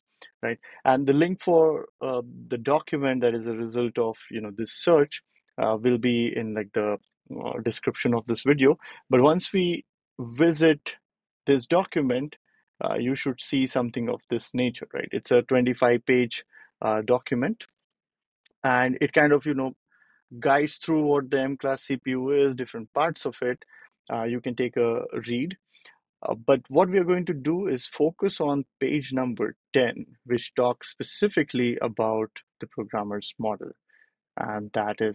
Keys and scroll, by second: 4.8 BackSpace, 6.9 ctrl+alt+super+p.